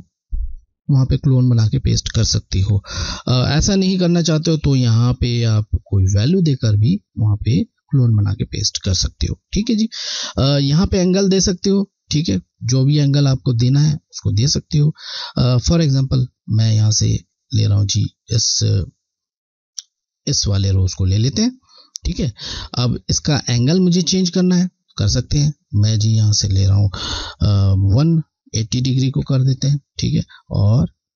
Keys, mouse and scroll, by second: 0.0 click, 16.6 click, 16.7 click, 20.1 alt+click, 25.8 click, 30.5 click.